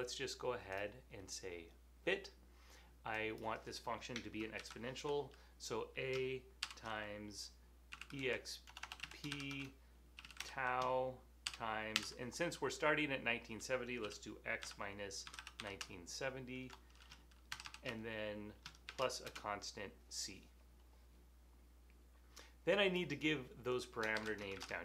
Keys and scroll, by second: 4.7 typing, 7.4-8.8 typing, 10.4 typing, 11.5-12.0 typing, 14.4-16.2 typing, 22.4 typing, 24.2-24.8 typing.